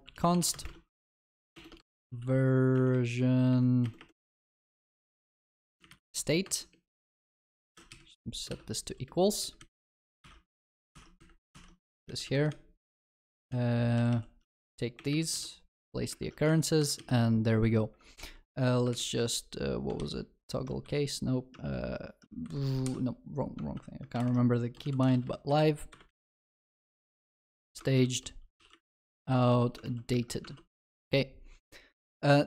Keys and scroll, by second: 10.2 ctrl+y, 13.9 alt+j, 15.7 Escape, 16.2 ctrl+alt+shift+l, 16.4 ctrl+s, 18.9 ctrl+shift+Left, 20.1 ctrl+alt+t, 22.4 Escape, 24.2 ctrl+shift+Left, 26.3 ctrl+w, 30.2 ctrl+alt+shift+l, 30.4 ctrl+s.